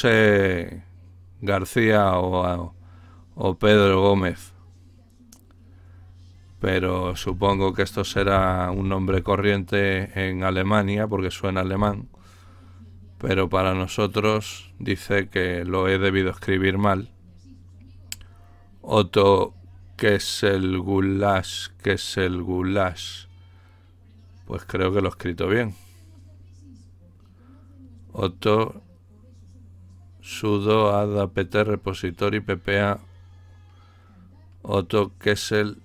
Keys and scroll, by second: 7.2-9.5 typing, 14.2 Return.